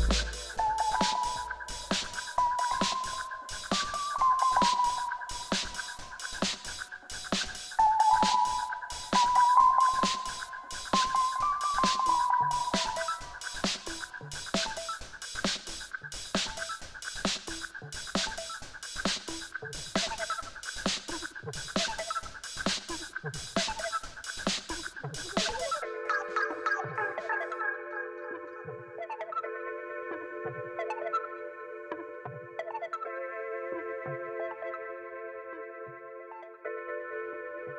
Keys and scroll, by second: 1.2 n, 1.5 o, 2.1 e, 17.9 shift+a, 18.6 m, 18.7 i, 21.0 shift+a, 21.8 n, 22.1 o, 22.2 i, 30.6 2, 31.7 Return.